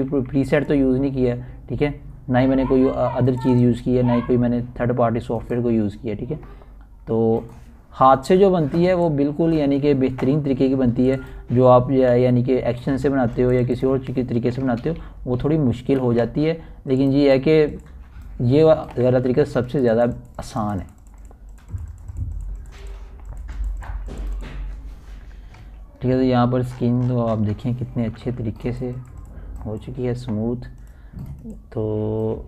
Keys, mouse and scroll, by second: 0.0 alt+scroll up 1, 2.5-2.9 typing, 3.3-13.7 drag, 14.7-15.5 typing, 16.0 click, 17.5 ctrl+alt+z, 19.5 click, 19.6 click, 21.7 typing, 22.3 click, 28.4 ctrl+alt+scroll down 1, 28.9-31.6 typing, 29.4 ctrl+alt+scroll up 1, 31.3 click.